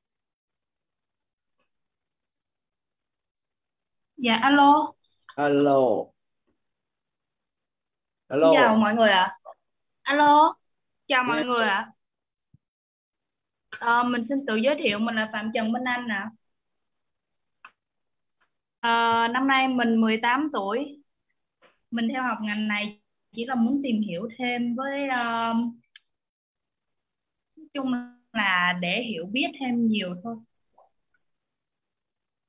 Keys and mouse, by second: 9.6 click, 14.8 click, 17.2 click, 22.7-28.9 typing, 31.7-32.4 typing.